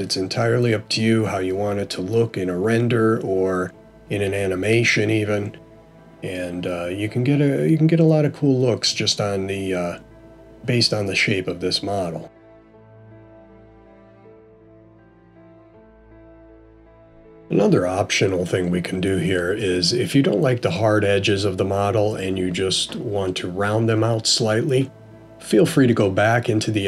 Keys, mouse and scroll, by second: 18.0 click, 21.2 click, 26.0 Tab.